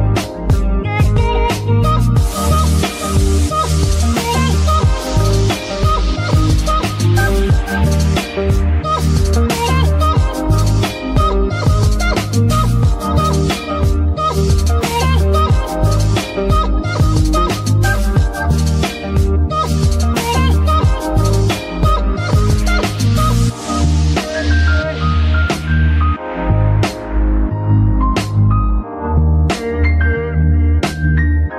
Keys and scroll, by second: 16.8 a, 17.8 z, 24.8 shift+z.